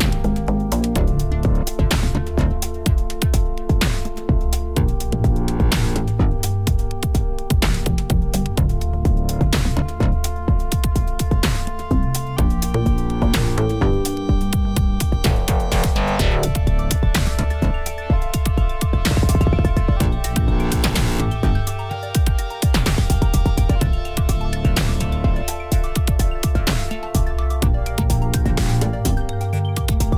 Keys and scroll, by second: 6.5 b, 13.0 shift+z, 15.7 shift+z, 16.5 e, 17.5 z, 20.7 a, 23.2 s, 24.1 x, 29.8 alt+a.